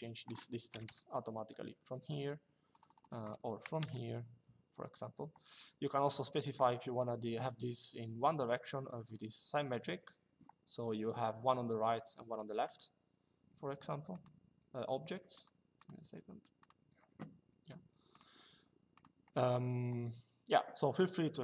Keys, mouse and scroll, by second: 0.4 KP_1, 2.4 click, 3.4 KP_3, 6.0 click, 8.8 click, 12.4 click, 13.8 click, 15.1 click, 17.9 click.